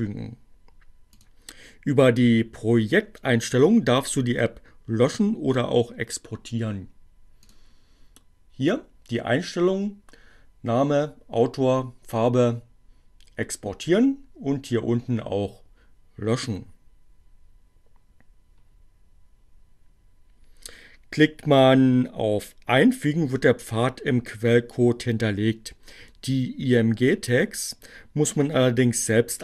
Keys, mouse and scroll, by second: 7.1 click.